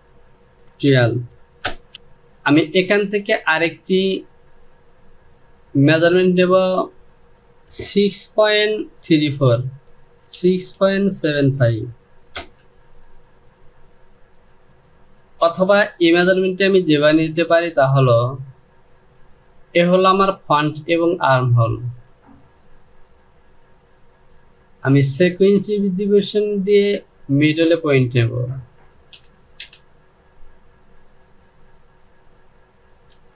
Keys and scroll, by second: 0.5 Down, 0.5 KP_2, 1.3 Return, 9.4 Down, 10.0 KP_6, 10.4 KP_Decimal, 10.9 KP_7, 11.2 KP_5, 12.0 Return, 28.9 KP_2, 29.2 Return.